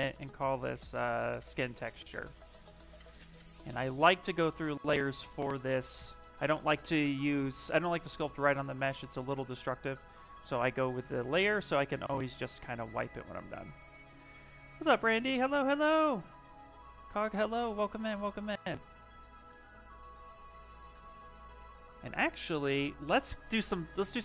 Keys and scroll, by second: 1.1-3.9 typing, 4.5 Return, 12.8 s, 21.3 space.